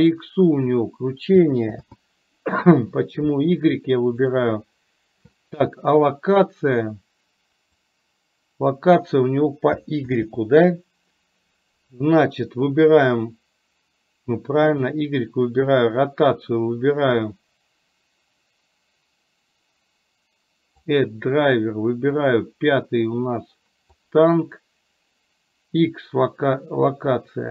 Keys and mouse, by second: 1.8 ctrl+z, 4.7-7.8 right drag, 7.8-9.1 drag, 10.1 ctrl+z.